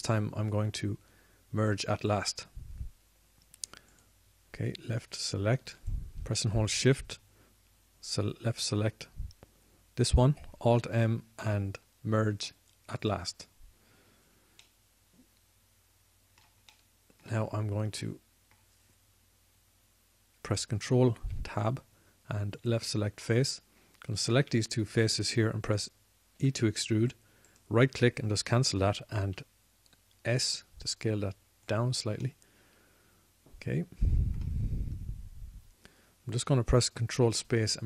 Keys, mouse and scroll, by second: 0.6 alt+m, 3.2 alt+m, 11.9 alt+m, 14.5 alt+m, 22.3 ctrl+Tab, 27.6 e, 30.4 s, 32.9 click, 33.5-35.2 middle drag.